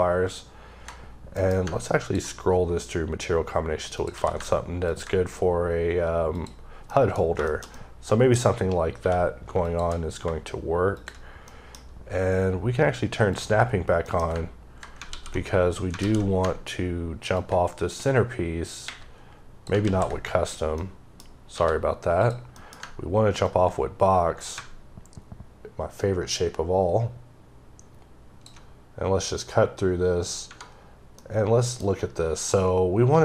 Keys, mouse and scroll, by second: 1.9 ctrl+click, 2.3-3.2 scroll up 3, 3.2-3.8 scroll down 1, 3.8 click, 4.0 q, 4.7 ctrl+click, 6.5 scroll down 2, 6.8 middle click, 7.1 scroll down 2, 7.3 shift+middle click, 8.2-8.9 scroll up 5, 8.9 q, 9.5 shift+click, 11.1 scroll down 2, 11.3 middle click, 13.2 click, 13.7 scroll down 1, 13.9 middle click, 15.0 w, 17.2 click, 18.7 ⊘, 20.7 middle click, 21.4 d, 22.1 click, 22.4 middle click, 23.3 ctrl+click, 31.1 middle click.